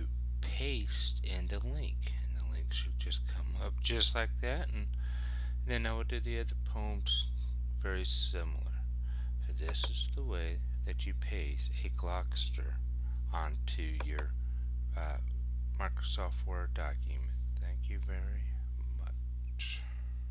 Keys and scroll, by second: 2.7 Return.